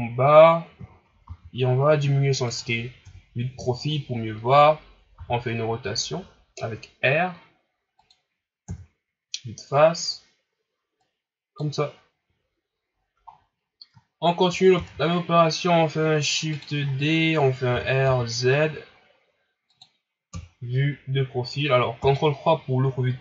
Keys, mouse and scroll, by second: 0.8 middle click, 0.8-1.2 scroll down 1, 1.2 s, 3.0 KP_3, 3.7 shift+scroll down 1, 4.0 scroll up 4, 5.1 r, 8.6 KP_1, 11.0-12.9 drag, 12.9-13.3 scroll down 4, 13.9 ctrl+scroll down 9, 14.8 shift+d, 16.8 scroll up 8, 17.7 r, 20.3 KP_3, 22.0 ctrl+KP_3.